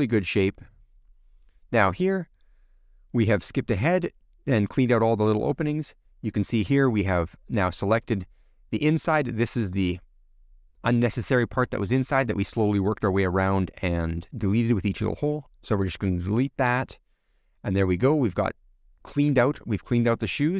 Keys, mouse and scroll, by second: 0.0 t, 1.0 alt+h, 1.4-2.3 scroll down 9, 1.7 middle click, 2.3 click, 3.0 l, 3.3-5.7 middle drag, 5.7 click, 6.0-7.4 middle drag, 7.4 click, 7.8-9.3 middle drag, 10.4 scroll up 5, 10.7-14.9 middle drag, 15.4-15.7 scroll down 4, 15.7-17.1 middle drag, 17.9 scroll down 3, 18.0-19.7 middle drag, 19.7 scroll down 2, 19.9 scroll up 3, 20.1 shift+middle click.